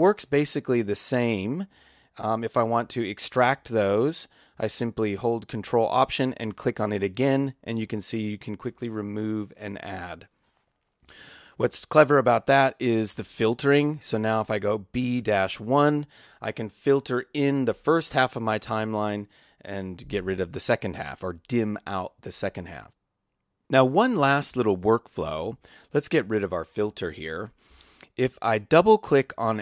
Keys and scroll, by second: 14.8-16.0 typing, 26.8 BackSpace.